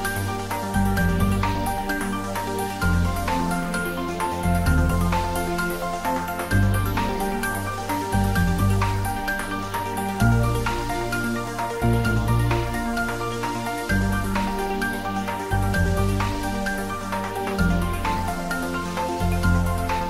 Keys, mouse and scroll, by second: 0.2 shift+click, 0.7 shift+click, 1.6-2.8 middle drag, 2.8 click, 3.2 shift+click, 3.7 shift+click, 4.4 shift+click, 5.0 ctrl+z, 5.4 1, 5.9 shift+click, 6.9-8.9 middle drag, 8.9 click, 9.6 shift+click, 10.6 ctrl+z, 12.4 click, 14.1 ctrl+middle click, 14.6 ctrl+middle click, 15.0 shift+middle click, 15.7-16.1 typing, 16.6 click, 16.6 click, 17.6 shift+click, 18.2 ctrl+z, 18.8 shift+click.